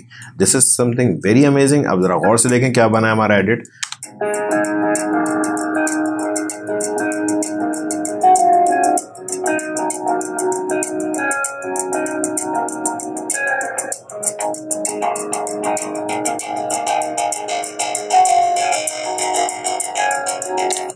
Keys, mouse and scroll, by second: 3.8 space, 20.7 space.